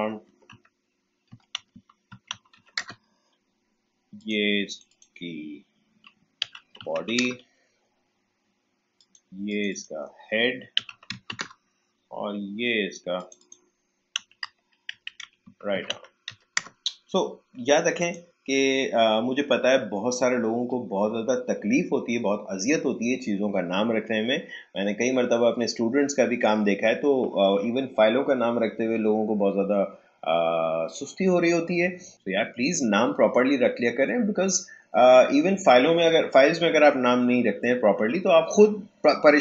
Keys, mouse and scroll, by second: 0.0-3.0 typing, 4.1 click, 6.1-7.4 typing, 8.9 click, 10.5-11.8 typing, 13.1 click, 13.9-16.8 typing, 18.0 click.